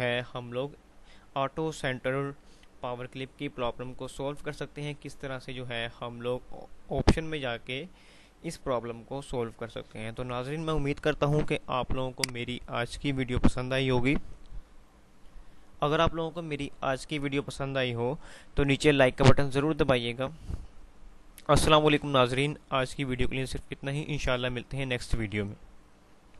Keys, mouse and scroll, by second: 12.3 click, 26.2 ctrl+Num_Lock.